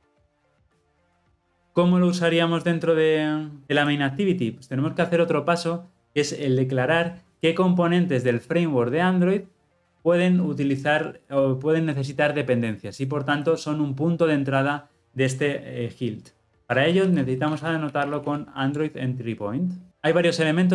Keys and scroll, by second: 1.1 ctrl+alt+l, 1.1 ctrl+alt+o, 18.8 Return.